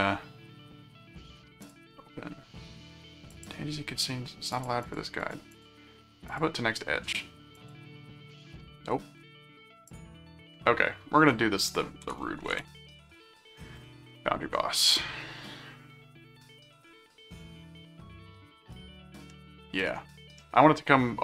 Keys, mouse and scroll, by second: 1.6 click, 3.3 click, 4.5-6.0 drag, 6.3 click, 7.5 click, 9.8 click, 11.8-13.4 typing, 14.1 Return, 19.3-20.4 middle drag.